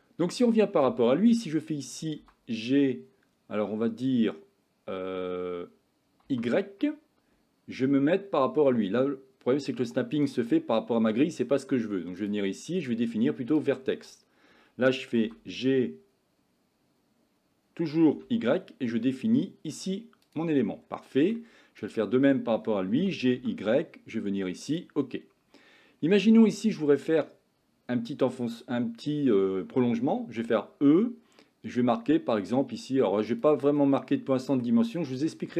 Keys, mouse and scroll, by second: 2.2 g, 12.2-14.0 drag, 15.3 g, 20.7 middle click, 23.0 g, 25.1-26.5 middle drag, 31.6 e, 33.8 middle click, 35.1 shift+middle click.